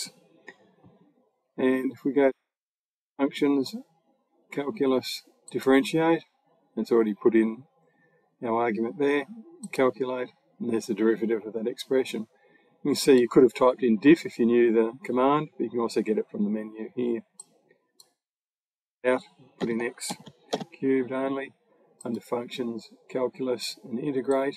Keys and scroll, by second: 18.4-20.8 typing.